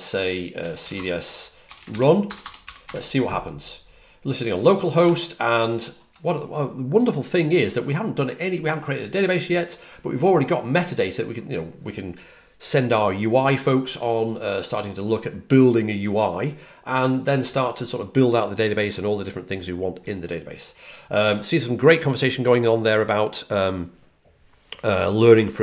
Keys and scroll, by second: 0.4-2.7 typing.